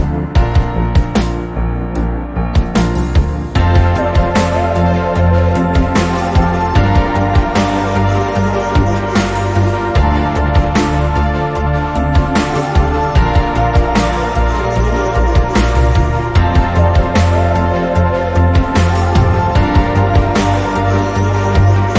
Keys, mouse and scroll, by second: 0.1-0.9 middle drag, 1.1-2.0 middle drag, 2.0 click, 2.7-8.5 middle drag, 10.1-10.6 shift+middle drag, 10.8-13.3 middle drag, 16.8 click, 20.8 click.